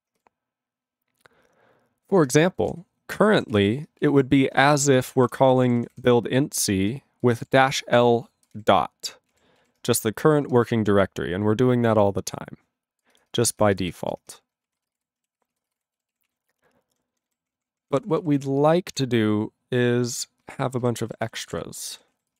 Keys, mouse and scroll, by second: 2.4 ctrl+s, 3.2 ctrl+g, 3.5 ctrl+s, 14.4 ctrl+s, 14.7 ctrl+a, 14.8 ctrl+space, 14.9 ctrl+e, 14.9 ctrl+g, 15.4 ctrl+s, 15.5 ctrl+a, 15.6 ctrl+space, 15.7 ctrl+e, 15.8 ctrl+g, 16.1 ctrl+s, 16.3 ctrl+a, 16.4-17.3 ctrl+n, 17.4 ctrl+p, 17.6 ctrl+p, 17.7 ctrl+p, 17.9 ctrl+e, 18.0 ctrl+p, 18.0 ctrl+e, 18.2 ctrl+p, 18.2 ctrl+e, 18.3 ctrl+p, 18.4 ctrl+e, 18.4 ctrl+p, 18.9 ctrl+e, 20.4 ctrl+space, 20.5 ctrl+a, 20.8 ctrl+g, 21.2 ctrl+s, 21.4 ctrl+space, 21.5 ctrl+e, 21.5 ctrl+g, 22.0 ctrl+s, 22.1 ctrl+a, 22.3 ctrl+space.